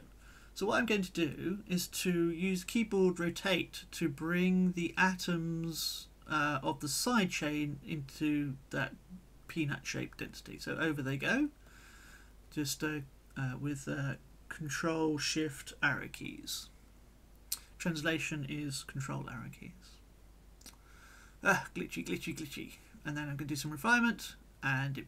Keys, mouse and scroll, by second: 4.9 click, 7.0 ctrl+shift+Left, 11.0-15.2 drag, 15.2-16.2 middle drag, 16.2-17.6 drag, 22.4 click, 23.8 click, 25.0 click.